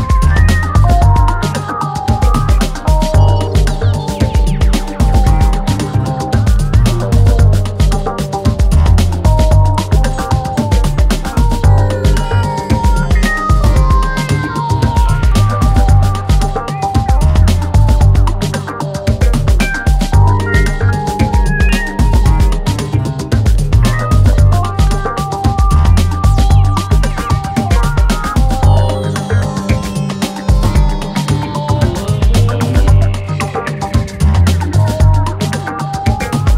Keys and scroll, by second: 20.3 Delete, 25.5 ], 28.3 4.